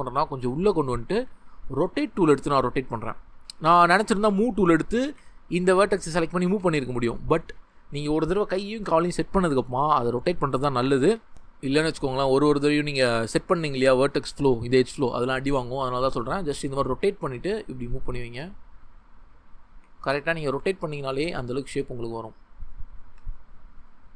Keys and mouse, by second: 0.6 click, 1.2 r, 3.0 click, 3.3 ctrl+z, 5.0 Tab, 6.4 g, 6.9 ctrl+z, 7.5 Tab, 10.2 r, 10.9 click, 11.1 ctrl+z, 13.9 Tab, 15.7 r, 17.2 g, 18.0 click, 18.3 r, 19.7 g, 20.2 click, 20.5 r, 21.4 click, 21.6 g, 22.7 click, 23.0 r, 24.0 click.